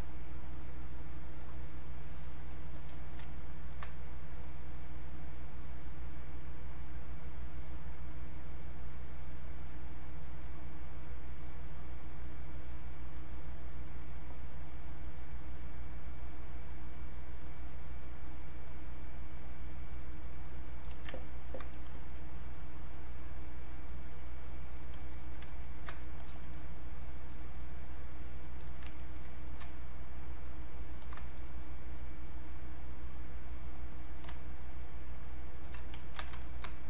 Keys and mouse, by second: 1.2 Return, 2.9 alt+click, 3.3 ctrl+right click, 4.5-6.1 drag, 6.1-7.7 drag, 7.7 click, 9.9-12.7 drag, 14.7-19.3 drag, 21.2 ctrl+right click, 21.9 alt+click, 22.3-24.5 drag, 25.1 alt+click, 25.7 ctrl+right click, 26.3 alt+click, 26.5-28.6 drag, 28.6 alt+click, 29.0 ctrl+right click, 30.4 ctrl+shift+click, 31.4-34.9 drag, 36.0 ctrl+shift+right click, 36.4 ctrl+shift+click.